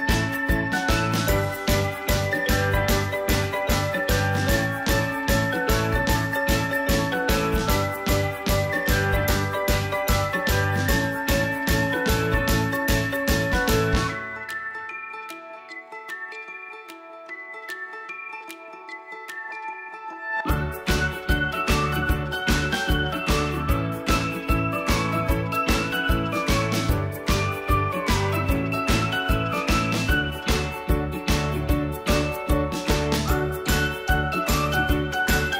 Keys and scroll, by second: 5.8 Delete, 8.8 Delete, 11.7 Delete, 15.0 Delete, 20.3 Delete.